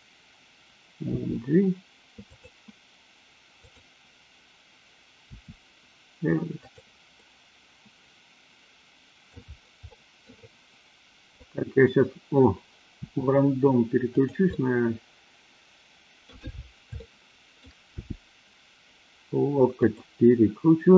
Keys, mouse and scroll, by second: 1.1 g, 2.2 click, 3.6-4.2 drag, 5.3 r, 6.6 click, 7.2-9.3 middle drag, 9.8-10.3 middle drag, 11.3 click, 12.9 r, 14.1 click, 14.4-16.3 middle drag, 17.0-17.7 shift+middle drag, 17.9 g, 19.8 click.